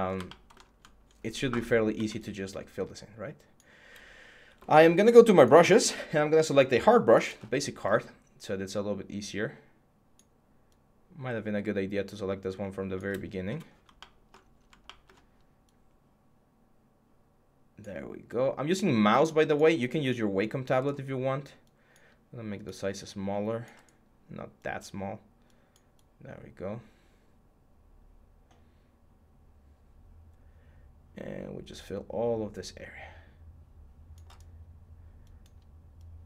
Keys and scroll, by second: 1.7 x, 4.3 x.